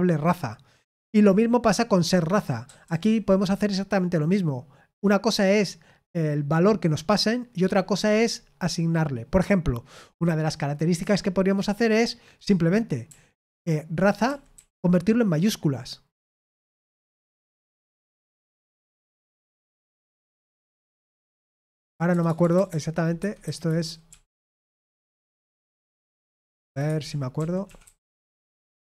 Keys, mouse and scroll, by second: 2.6-3.0 typing, 12.4-15.0 typing, 16.2-25.4 typing, 26.5-28.5 typing.